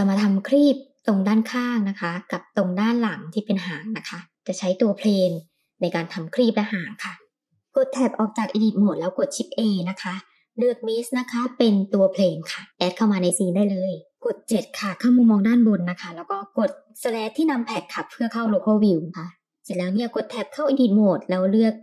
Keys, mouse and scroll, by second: 1.4 middle click, 2.4-4.5 middle drag, 6.4 middle click, 7.7 shift+Tab, 8.3 shift+a, 14.5 KP_7, 19.7 Tab, 21.5 click.